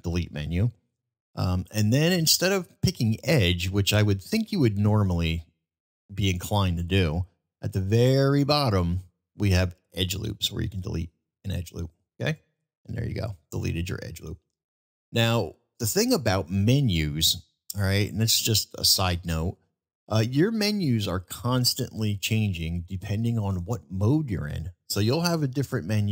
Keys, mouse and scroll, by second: 12.9-13.4 middle drag, 14.5-15.0 middle drag, 16.9-17.3 middle drag.